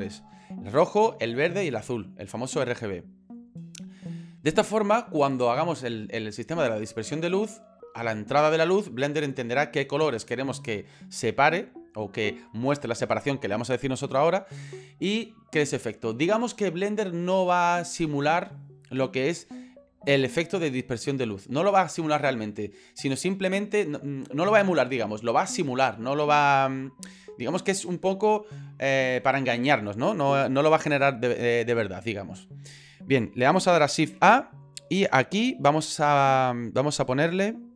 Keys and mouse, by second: 34.0 shift+a.